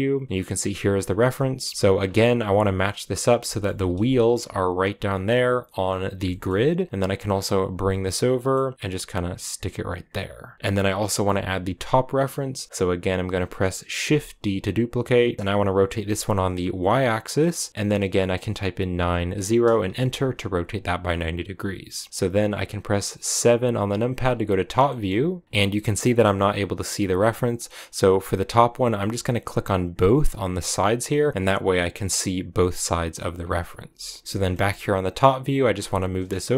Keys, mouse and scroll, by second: 1.7 shift+middle click, 1.7-2.1 scroll up 7, 2.3 g, 3.3 shift+middle click, 3.5 scroll up 2, 3.7 g, 4.9-5.5 scroll down 6, 6.1 shift+middle click, 6.8-7.6 scroll down 1, 7.6 g, 10.4 g, 14.0 shift+d, 15.9 middle click, 17.0-18.7 middle drag, 22.1 g, 23.3 KP_7, 24.0 scroll down 6, 24.7 shift+middle click, 25.4 scroll up 1, 29.9-31.9 drag, 31.9-33.8 middle drag, 33.8 KP_7, 34.2 shift+middle click, 35.0 scroll up 1.